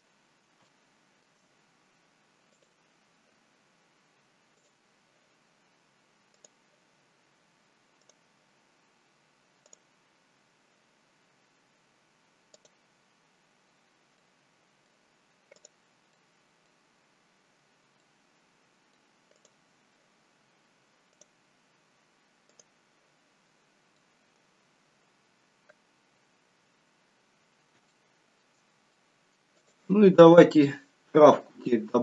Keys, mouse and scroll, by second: 0.2-0.6 scroll down 3, 0.8 shift+middle click, 1.8-2.4 scroll up 2, 2.6 click, 2.6-3.8 scroll up 1, 8.2 click, 14.3 middle click, 14.3-14.7 scroll down 3, 16.8 middle click, 16.8 click, 17.3-18.1 scroll up 1, 18.1 scroll up 1, 18.2 middle click, 19.5 click, 23.6-24.2 scroll down 2, 24.2 middle click, 24.2-24.6 scroll down 2, 26.6 scroll up 4, 28.0 shift+middle click, 29.1 middle click, 29.7 click, 31.3-31.8 scroll down 2, 31.8 middle click.